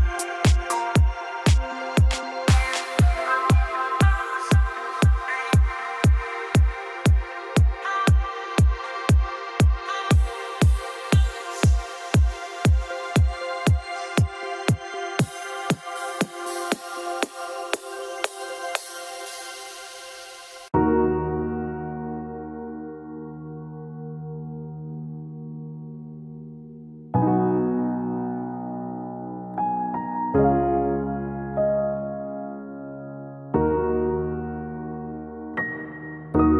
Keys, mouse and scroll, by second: 1.2 click, 2.6 click, 2.7-3.9 scroll, 4.2 o, 5.5 click, 5.8-6.2 scroll, 6.2-6.8 scroll down 1, 7.3-8.1 scroll, 7.3 t, 8.8 click, 9.6 click, 9.9-10.6 scroll down 2, 10.6-11.1 scroll up 4, 12.7 click, 13.5 click, 14.9 click, 15.1 click, 17.1 click, 17.9 right click, 19.2 click, 20.0 middle click, 20.1 middle click, 21.0-22.0 scroll up 5, 22.3 click, 24.0 click, 26.3 m, 29.6 click, 30.2-30.6 scroll down 3, 32.6 Escape, 33.5 scroll up 1, 33.6 scroll down 3, 35.2 click.